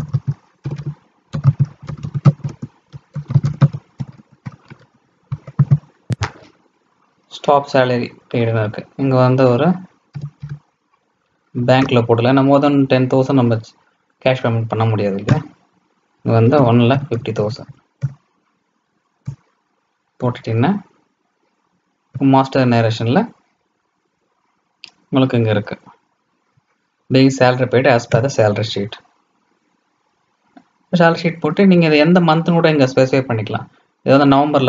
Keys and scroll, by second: 5.5 ctrl+a.